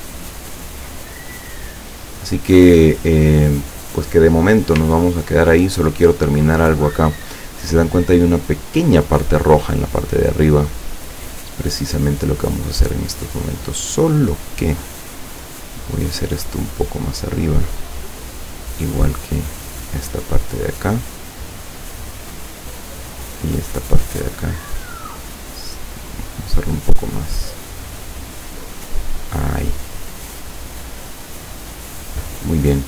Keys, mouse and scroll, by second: 0.3 ctrl+scroll down 2, 1.3 ctrl+click, 5.2-5.6 ctrl+scroll up 2, 6.0 ctrl+click, 10.9 click, 13.6 click, 14.3 click, 15.4-17.7 drag, 18.2 click, 19.0-21.3 drag, 21.9 click, 22.8 click, 23.4-25.1 drag, 25.7-28.2 drag, 28.5 click.